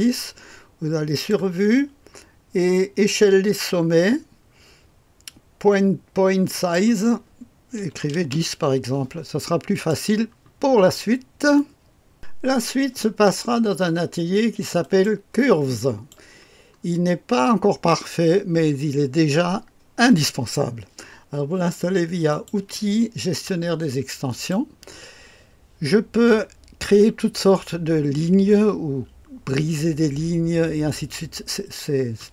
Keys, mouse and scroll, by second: 1.0 click, 1.6 scroll down 1, 3.0-3.9 scroll down 1, 3.9 scroll up 1, 6.5 click, 7.1 click, 7.7 KP_1, 8.1 KP_0, 8.2 Return, 9.6 click, 11.5-12.5 drag, 14.8-16.7 drag, 16.9-17.8 scroll up 1, 17.8-20.4 scroll down 2, 22.2 click, 24.3 click.